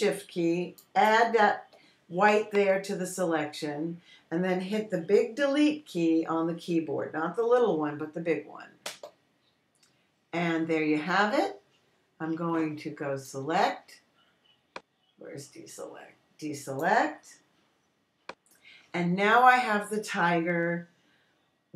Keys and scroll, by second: 10.3 BackSpace.